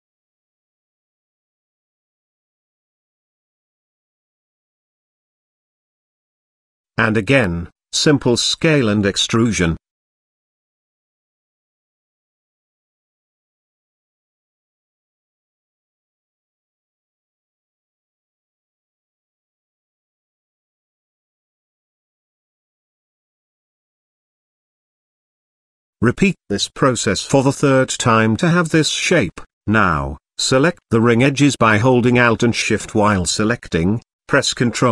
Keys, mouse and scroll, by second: 0.2 g, 3.6 g, 5.0 KP_Decimal, 5.6 middle click, 6.6 middle click, 7.2 e, 9.0 s, 12.3 e, 15.1 middle click, 16.5 shift+middle click, 17.8 e, 19.4 s, 22.9-24.3 middle drag, 25.0 e, 28.1-29.7 middle drag, 30.7 click, 31.5 middle click, 32.1 click, 32.8 alt+click, 33.3 middle click, 34.5 shift+click.